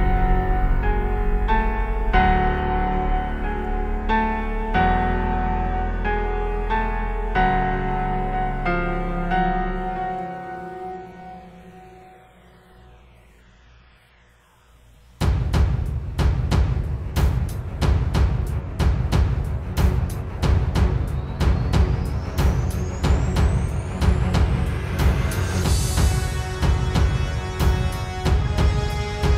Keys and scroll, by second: 1.0 space, 1.8 space, 2.5 super+space, 2.7 super+space, 3.7 space, 9.3 super+z, 10.1 super+z, 10.2 space, 14.9 space, 18.4 space, 20.5 space, 21.1 super+space, 25.1 space, 25.5 space, 26.0 super+space, 26.6 super+space, 26.9 super+space.